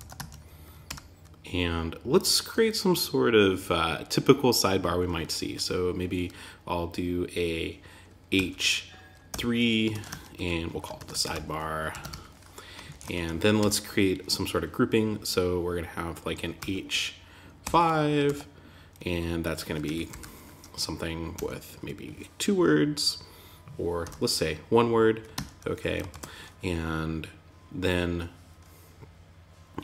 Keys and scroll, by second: 0.2 Return, 9.3 shift+., 9.4 Tab, 11.9 shift+s, 12.2 super+Right, 12.5 Return, 17.6 shift+., 24.7 Tab, 25.5 super+z.